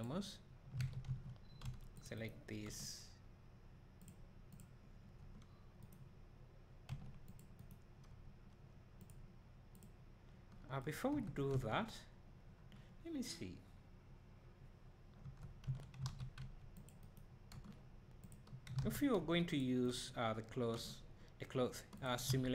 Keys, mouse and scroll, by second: 0.0 click, 0.8 alt+a, 1.9 c, 2.2 right click, 2.7 g, 4.6 click, 5.2 g, 5.9 right click, 7.2 c, 7.7 right click, 8.2 g, 9.8 click, 10.4 g, 11.1 Tab, 15.2 Tab, 16.1 alt+a, 16.2 click, 16.7 c, 17.1 right click, 17.5-18.8 drag, 17.5 g, 18.8 alt+a, 19.5 click, 19.5 c, 19.9 right click, 20.7 click, 20.7 g, 22.3 alt+a.